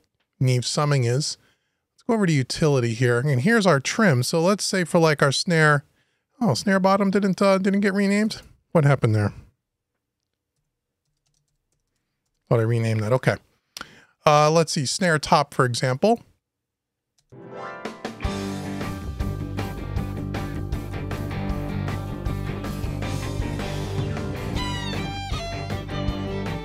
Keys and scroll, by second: 12.0 shift+Return.